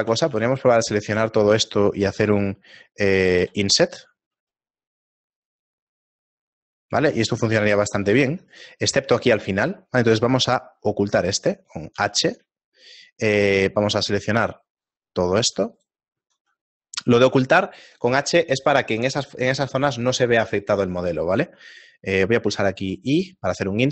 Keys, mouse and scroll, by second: 0.1 a, 0.3 a, 3.4 i, 8.1 ctrl+z, 8.5 right click, 9.0 right click, 11.9 h, 15.8 alt+right click, 22.2 i.